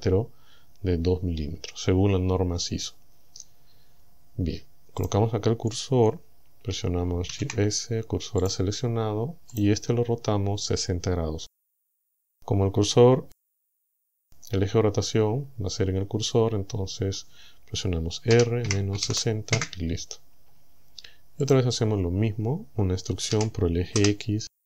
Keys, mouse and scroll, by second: 5.1 right click, 7.3 shift+s, 8.5 click, 9.6 right click, 18.3 r, 18.7 KP_Subtract, 19.0 KP_6, 19.1 KP_0, 19.6 KP_Enter, 21.5 right click, 23.3 e, 24.0 x.